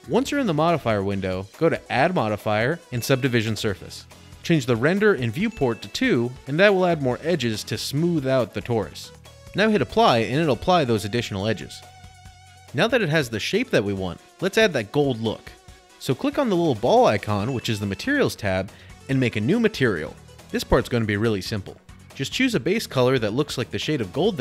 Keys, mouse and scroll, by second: 0.4 click, 1.8 click, 4.7 click, 6.5 click, 7.5-8.7 scroll, 10.1-10.6 scroll, 11.1-12.2 scroll, 12.2 click, 13.0 scroll, 14.3-15.0 scroll, 16.4 scroll, 18.2 click, 20.5 click, 21.6 click.